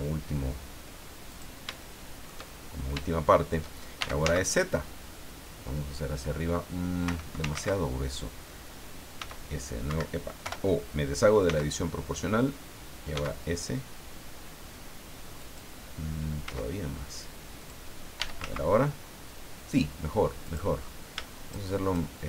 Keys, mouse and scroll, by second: 1.3 click, 1.8 shift+click, 2.5-2.9 shift+scroll down 1, 3.0 shift+click, 3.7-4.7 typing, 7.0 Escape, 7.5 ctrl+z, 9.2 s, 9.9 Escape, 10.4 o, 11.4 s, 13.1 s, 15.4 click, 16.5 s, 17.6 click, 17.9-18.9 typing, 20.4 click, 21.5 shift+click.